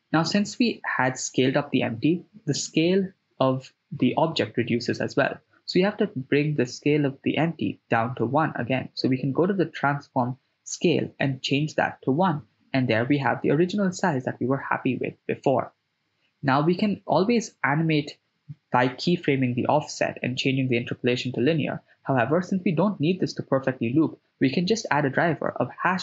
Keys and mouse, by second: 2.3-2.6 right drag, 3.3 s, 7.9 click, 9.2-11.4 shift+drag, 15.7 click, 17.3-26.0 drag.